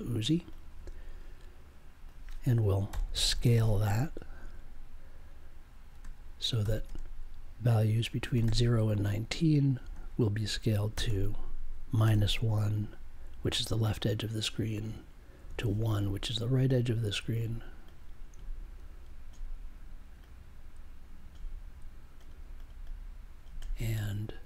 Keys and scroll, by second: 2.8 n, 5.9 space, 6.6 o, 6.8 space, 8.3 1, 9.8-12.0 typing, 15.1-16.0 typing.